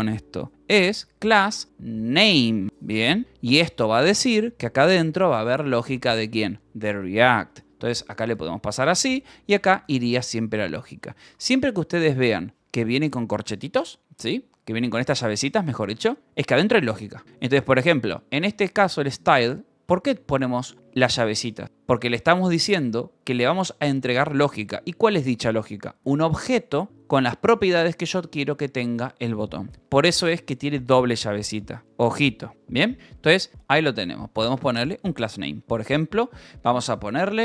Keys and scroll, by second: 0.5 BackSpace, 2.5 ctrl+n, 2.6-3.6 typing, 5.8 BackSpace, 8.5 shift+[, 9.4 a, 10.0 s, 10.0 BackSpace, 11.2 Escape, 11.9 h, 12.2 l, 14.5-15.9 typing, 19.2 h, 26.3 l, 29.4-30.9 typing, 32.5-34.9 typing.